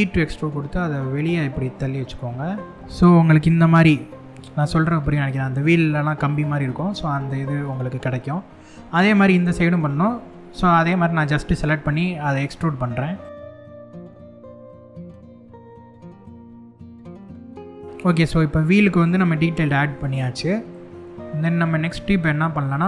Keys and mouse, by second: 2.7 middle click, 5.4-7.2 middle drag, 7.9 shift+middle click, 8.7 middle click, 9.7 shift+middle click, 10.8 middle click, 12.8 shift+click, 13.5 shift+click, 13.7 shift+click, 13.9 shift+click, 14.0 shift+click, 14.2 shift+click, 14.3 shift+click, 14.5 shift+click, 14.6 shift+click, 14.8 shift+click, 15.1 shift+click, 15.3 shift+click, 15.6 shift+click, 16.3 shift+click, 16.6 middle click, 16.8 middle click, 17.0 shift+middle click, 17.6 click, 17.8-19.6 middle drag, 20.3-22.3 middle drag.